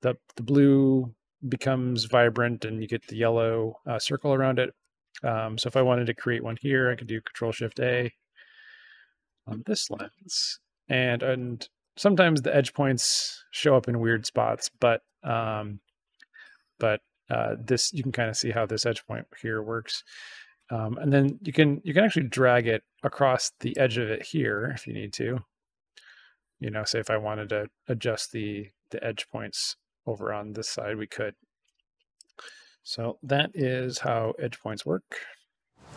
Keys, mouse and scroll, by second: 4.7 click, 7.5 ctrl+shift+a, 9.9 right click, 11.8-12.8 drag, 13.9-18.8 drag, 19.8-23.6 drag, 24.5 right click, 25.9-32.1 drag, 32.4 click, 34.7 shift+BackSpace.